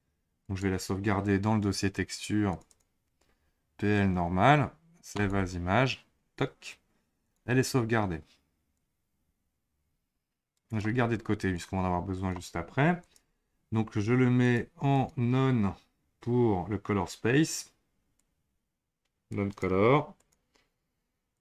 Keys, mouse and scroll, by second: 7.2 click, 8.7-10.7 drag, 11.5-13.1 drag, 14.4 click, 14.9-18.1 drag, 21.3 click.